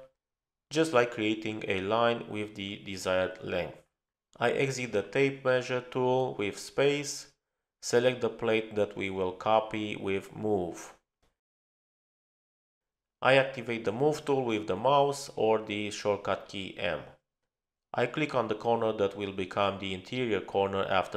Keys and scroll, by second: 4.7 Return, 6.1 Return, 15.4 typing, 17.2 space.